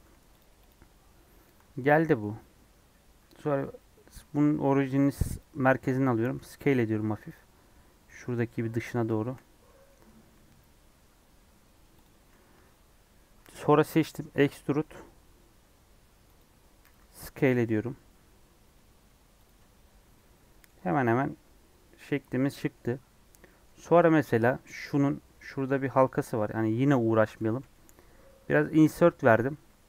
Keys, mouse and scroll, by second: 0.0 Tab, 0.3 click, 0.6 click, 1.0 scroll down 2, 1.2 middle click, 1.5 Tab, 1.8 middle click, 2.6 Tab, 3.1 s, 5.3 right click, 6.2 s, 8.0 middle click, 8.2-8.6 scroll up 6, 8.6-10.2 middle drag, 10.2 s, 12.1-12.5 scroll down 1, 12.5 Tab, 13.3 a, 14.1 e, 19.5 Tab, 19.9 scroll down 1, 20.1 middle click, 20.8 scroll down 2, 20.9-22.7 middle drag, 22.7-23.4 scroll up 2, 22.8 Tab, 23.4-25.8 middle drag, 25.8 scroll up 1, 25.9-27.5 shift+middle drag.